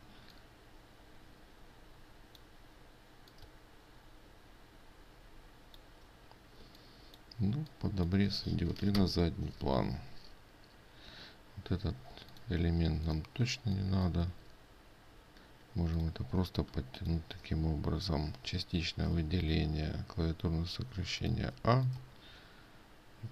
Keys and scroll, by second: 12.7 ctrl+space.